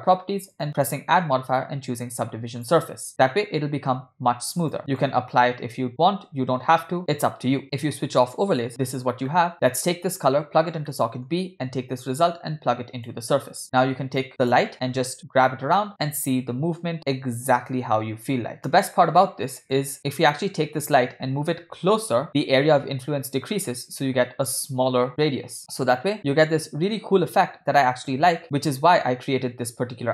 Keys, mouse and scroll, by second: 0.5-3.0 drag, 4.6 click, 4.9-7.0 drag, 7.7 click, 9.3 middle drag, 10.9 middle click, 12.1 drag, 12.2-13.2 drag, 14.4 click, 15.1 g, 19.1-19.8 middle drag, 19.9-20.3 middle drag, 19.9 click, 21.4 g, 25.6 KP_1, 25.6 KP_5, 26.1 g.